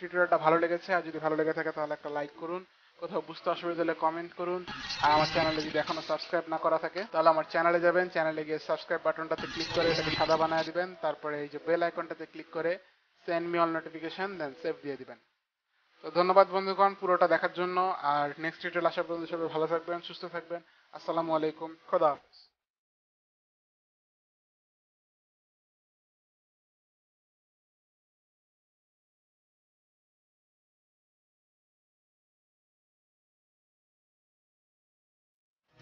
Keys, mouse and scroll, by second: 7.0 F9, 9.0 click, 10.7 click, 11.6 click, 14.4 click.